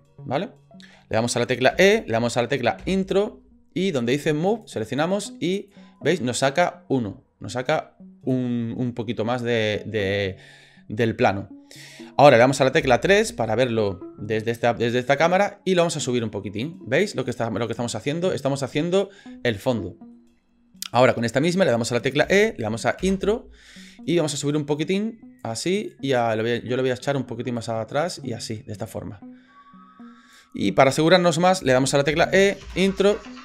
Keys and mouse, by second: 1.7 e, 4.5 click, 5.7-8.3 drag, 12.8 KP_3, 15.9-19.0 drag, 19.7 shift+middle click, 22.2 e, 24.4-25.4 drag, 25.9 click, 27.5-30.5 drag, 32.1 e.